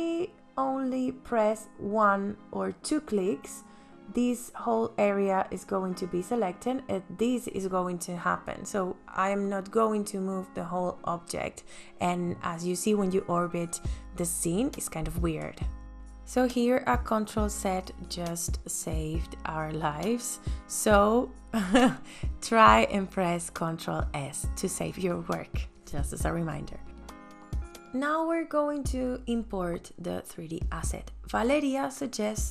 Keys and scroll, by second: 0.5 space, 4.7 m, 15.8 ctrl+z, 21.3 space, 22.7 ctrl+s.